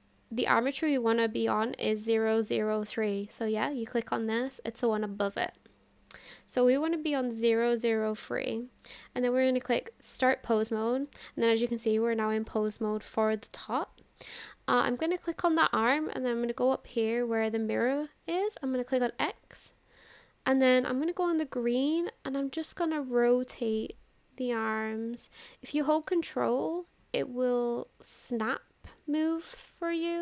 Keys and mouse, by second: 0.8 click, 7.0 click, 7.4-8.5 drag, 9.5 click, 11.5 click, 12.8-13.2 shift+drag, 18.9-21.4 drag, 22.0-26.1 ctrl+drag, 28.0-30.2 ctrl+drag.